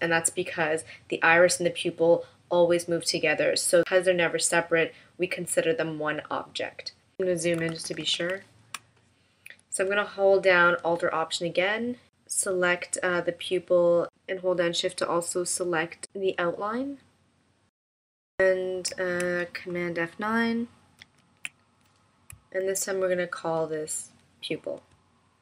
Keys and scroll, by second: 7.9 super+=, 8.8 space, 16.2 super+-, 21.0 super+F9.